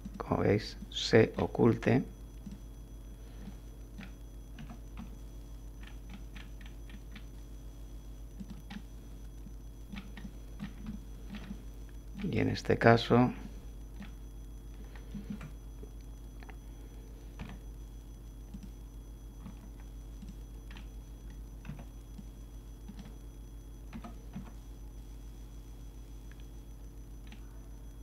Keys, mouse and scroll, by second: 0.0 click, 0.8 click, 2.4 click, 3.4 click, 4.6 g, 5.0 x, 5.8 middle click, 6.9-7.3 scroll down 2, 8.4-10.1 drag, 10.9-12.3 shift+drag, 13.4 click, 15.3 1, 17.4 z, 18.5 click, 19.4 z, 20.2 click, 20.7 scroll up 1, 21.7 b, 22.2 click, 23.9 g, 24.3 x, 27.3 middle click.